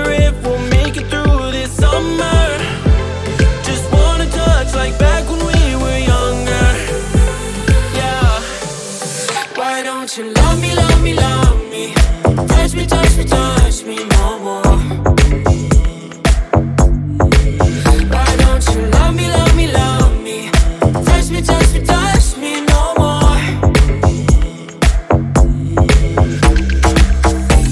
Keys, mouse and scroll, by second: 0.2 click, 1.1 click, 2.0 s, 4.5 middle click, 5.1-5.7 scroll up 5, 5.9-6.6 middle drag, 6.6 click, 7.8 drag, 9.1 click, 9.9-10.7 middle drag, 10.7 click, 11.3-12.7 middle drag, 12.7-14.2 drag, 15.7 click, 16.6-19.7 middle drag, 20.5 click, 22.6 click, 23.1 s, 24.8 click, 25.0 w, 27.3-27.7 middle drag.